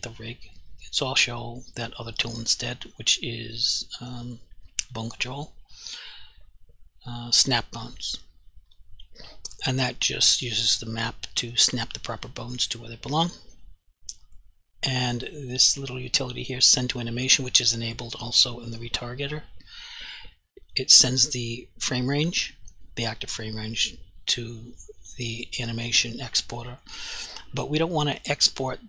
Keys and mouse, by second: 1.0 click, 5.0 click, 8.7 click, 19.3 click, 25.1 click.